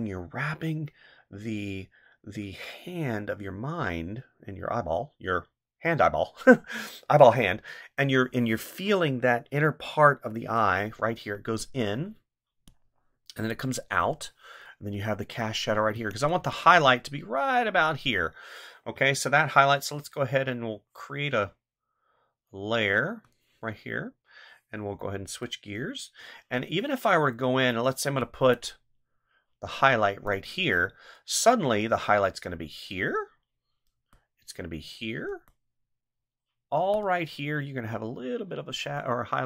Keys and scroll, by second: 12.0 ctrl+z, 18.9 ctrl+z.